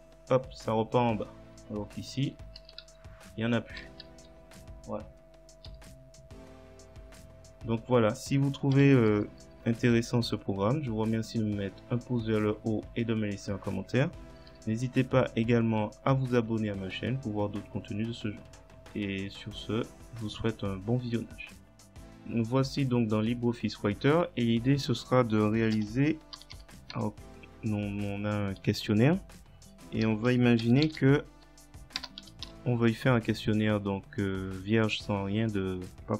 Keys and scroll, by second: 2.3-3.9 typing, 8.8 BackSpace, 9.5 Delete, 14.5 Delete, 16.6 Delete, 18.1 BackSpace, 25.8 Return, 26.1-27.4 typing, 30.1 Home, 30.3 Delete, 30.9 shift+n, 31.3 End, 32.3 space, 32.5 /.